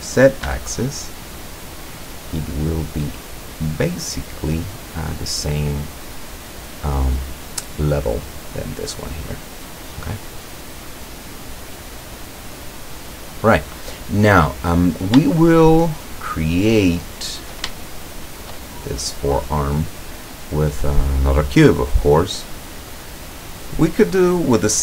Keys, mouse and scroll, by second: 0.5 e, 2.9 click, 3.4-5.0 middle drag, 9.8 click, 10.8-13.6 drag, 15.4 shift+click, 17.0 shift+click, 17.8 shift+click, 18.2 shift+click, 21.9-23.9 drag.